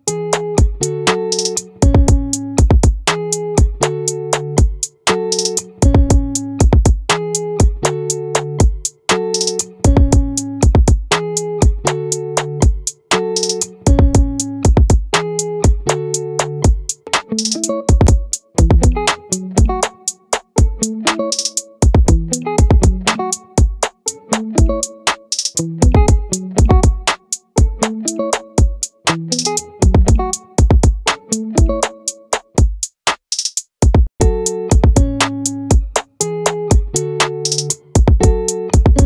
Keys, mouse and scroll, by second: 1.5-3.3 middle drag, 5.3-7.1 drag, 12.5-20.6 right drag, 20.6-22.3 middle drag, 22.3 right click, 22.6 ctrl+z, 23.6-25.4 right drag, 25.4 middle click, 26.0-27.2 drag, 29.0-30.8 drag, 35.0 ctrl+r.